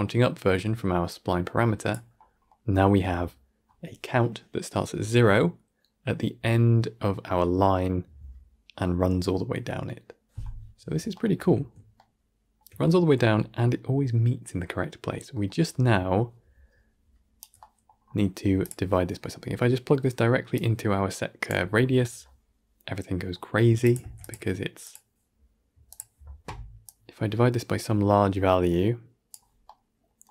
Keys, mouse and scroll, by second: 1.0-15.5 drag, 15.5-18.6 right drag, 18.6 click, 23.9 shift+d, 25.9-29.5 drag, 29.5-30.3 middle drag.